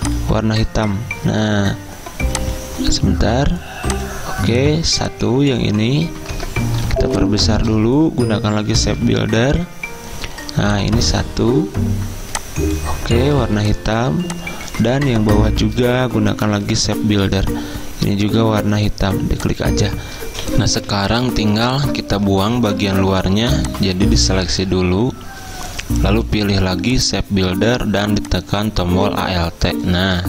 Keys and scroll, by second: 6.9 z, 8.9 m, 13.4 z, 16.7 m, 20.8 z, 23.2 v, 29.1 v.